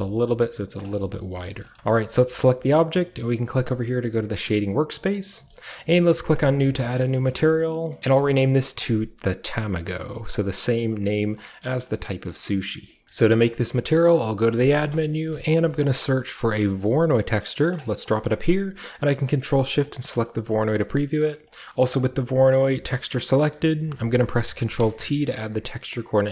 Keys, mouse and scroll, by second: 0.6 click, 0.9-1.6 scroll down 1, 1.6 scroll down 1, 1.9-3.6 shift+middle drag, 1.9-3.6 shift+scroll up 2, 4.3 click, 5.1-6.3 scroll down 2, 5.3-6.3 shift+middle drag, 6.3 click, 6.9-8.0 shift+middle drag, 6.9-8.0 shift+scroll up 1, 8.0 ctrl+c, 8.1 ctrl+v, 8.7 click, 10.0 click, 13.0 typing, 14.4 click, 14.4-15.4 typing, 16.8 click, 17.6 click, 18.1 click, 19.8 ctrl+shift+click, 21.4-23.2 drag, 21.6 typing, 23.2-23.8 scroll down 1, 23.5-25.1 ctrl+middle drag, 24.6 ctrl+t, 25.2-26.3 ctrl+middle drag, 25.5 a.